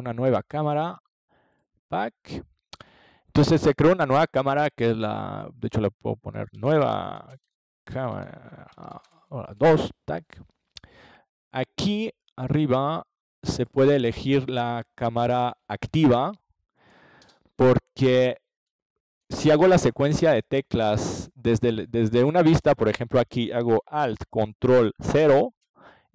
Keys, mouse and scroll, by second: 0.2 KP_4, 2.2 ctrl+s, 6.2-10.6 drag, 11.3-13.2 drag, 16.5-18.5 drag, 25.7-26.1 middle drag.